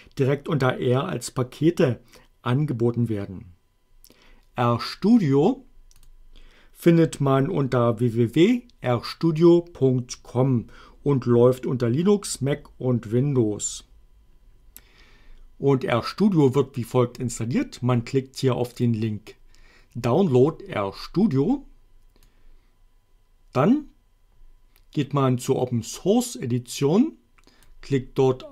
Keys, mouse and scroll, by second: 6.0 click, 18.8 click, 22.3-27.8 drag.